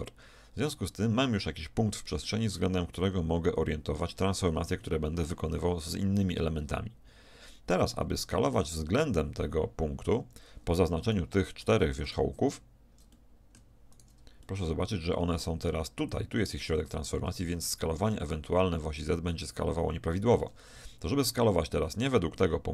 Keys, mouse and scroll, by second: 11.1-12.6 shift+middle drag, 13.3-16.2 middle drag.